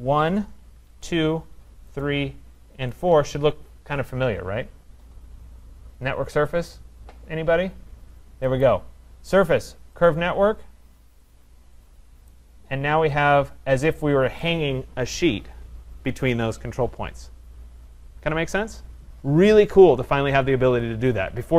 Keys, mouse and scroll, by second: 1.1 shift+click, 2.1 shift+click, 3.1 click, 8.6 click, 10.1 click, 11.3 click, 11.9 click, 14.4 right click.